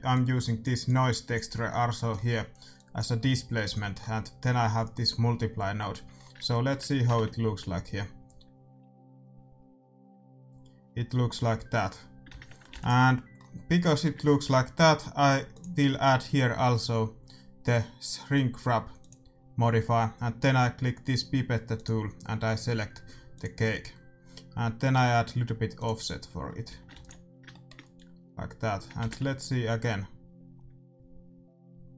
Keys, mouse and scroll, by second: 2.4-4.6 middle drag, 8.3 shift+z, 12.4 shift+z, 12.6 ctrl+s, 13.3-15.4 middle drag, 15.4-17.5 drag, 21.7-23.6 drag, 25.7-27.6 drag, 26.6 a, 26.9 ctrl+s, 30.1 shift+z.